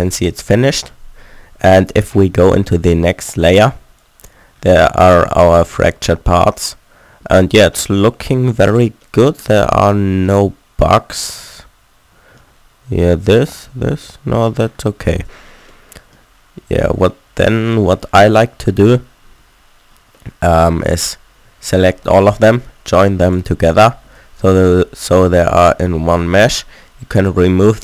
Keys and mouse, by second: 4.0-5.0 drag, 5.0-6.6 middle drag, 6.8 click, 10.6 middle click, 10.8 middle click, 11.4 middle click, 13.5-15.1 drag, 13.9 Tab, 15.1 a, 15.3 Tab, 21.5 a, 21.7 a, 24.2 Tab, 25.3 a, 25.9 a, 26.2 w.